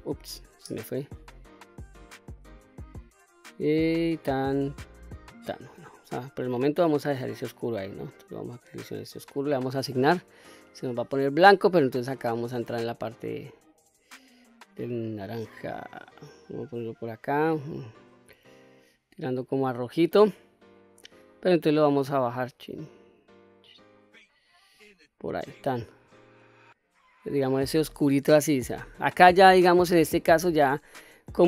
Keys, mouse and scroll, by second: 0.2 ctrl+z, 0.9-1.4 scroll up 1, 1.4 middle click, 3.9 shift+click, 5.2 shift+click, 5.8-6.2 middle drag, 6.8-8.6 scroll down 1, 8.6 click, 9.7 click, 12.1 click, 20.6 click, 25.2 click, 25.9-26.3 scroll down 1, 26.3-27.3 middle drag, 27.6-29.8 scroll up 2, 29.8-30.2 scroll down 2, 31.2-31.4 drag.